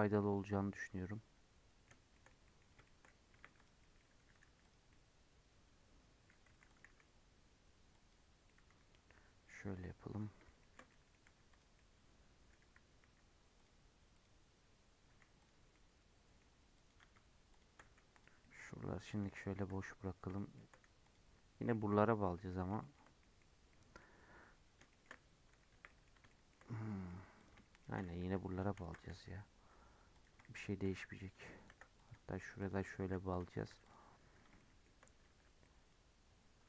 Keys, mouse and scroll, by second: 3.0-3.3 scroll up 1, 3.3 1, 3.5 click, 3.7 middle click, 4.2 g, 4.8-6.4 middle drag, 6.4 2, 6.6 click, 6.8 x, 8.3 scroll down 1, 8.4-11.2 middle drag, 11.2 2, 11.4 click, 11.7-13.0 middle drag, 13.0 x, 14.1 click, 15.0 x, 15.6 scroll down 1, 15.7-16.7 middle drag, 16.7 click, 17.4 shift+click, 17.8 x, 18.4 middle click, 18.9 scroll down 1, 19.1 middle click, 19.8-20.3 scroll up 5, 20.3 shift+middle click, 21.0 click, 21.9 middle click, 22.2 scroll down 2, 22.4-23.5 shift+middle drag, 23.5 scroll down 1, 23.6-25.4 middle drag, 25.4 3, 25.6 1, 25.8 middle click, 26.0 scroll up 2, 26.2-27.3 shift+middle drag, 27.3 click, 27.7 shift+click, 28.1 h, 28.7 ctrl+z, 29.2 j, 30.1 click, 30.5 shift+click, 30.9 j, 31.6 ctrl+z, 31.9 click, 32.5 shift+click, 33.0 j, 33.2 click, 33.6 3, 33.8 click, 34.3 scroll up 3, 34.5 shift+middle click, 34.8-35.2 shift+scroll down 1, 35.2 1, 35.6 middle click, 35.8 scroll down 2.